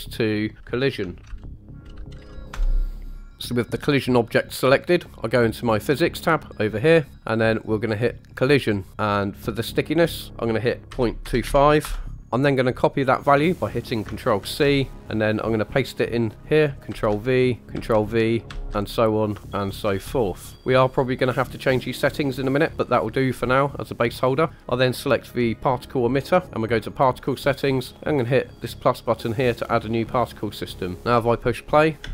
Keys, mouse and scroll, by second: 6.9 click, 8.2 click, 8.9-9.8 scroll down 1, 9.8-11.8 drag, 14.4 ctrl+c, 16.9 ctrl+v, 17.7 ctrl+v, 18.7 ctrl+v, 19.9 ctrl+v, 24.5 click, 26.8 click, 29.5 click, 31.2-31.8 shift+middle drag, 32.0 space.